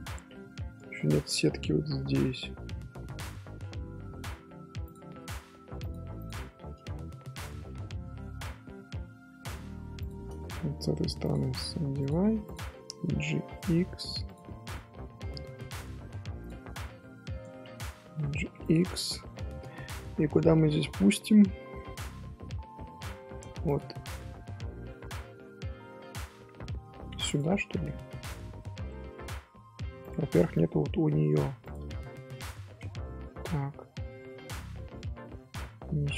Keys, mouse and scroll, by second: 0.5 scroll down 1, 0.8 scroll up 1, 0.8-2.2 shift+middle drag, 2.2 scroll down 1, 2.3-4.8 middle drag, 4.8 click, 5.2 scroll up 1, 5.8 shift+click, 6.1 shift+click, 6.5 scroll up 1, 6.9 g, 11.2 click, 12.2 1, 12.4 click, 18.3 g, 19.0 scroll down 1, 19.2 middle click, 19.6-19.9 scroll up 2, 19.9 shift+middle click, 20.6 scroll up 1, 21.7-23.6 middle drag, 23.6 click, 24.0-24.4 scroll down 1, 24.4 scroll up 1, 24.5 scroll down 1, 24.8-25.8 scroll up 2, 25.8-27.2 middle drag, 27.2 shift+click, 28.8-30.0 middle drag, 30.0 click, 30.6 middle click, 31.6 shift+click, 32.4 j, 33.5 Tab, 34.9 ctrl+z, 35.5 ctrl+z.